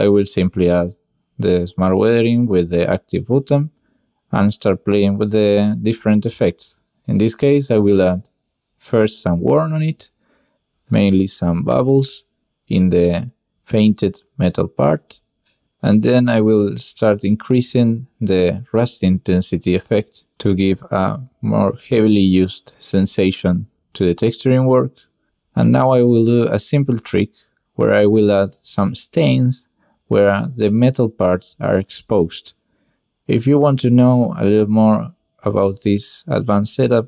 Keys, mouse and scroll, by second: 1.8-2.5 drag, 3.0 drag, 3.5 click, 4.0-4.5 drag, 5.3-5.6 shift+drag, 5.8 middle click, 6.8 n, 7.5 drag, 8.0 click, 8.5 click, 9.0-9.8 drag, 12.6 click, 13.5 click, 16.8-18.2 drag, 22.1 shift+middle click, 23.1-25.1 shift+middle drag, 25.7 middle click, 26.2 shift+middle click, 28.1 drag, 29.0 click, 30.1 click, 30.1 n, 32.0 shift+a, 32.9 click, 33.5 click, 34.7 click, 36.1 click, 36.4 click.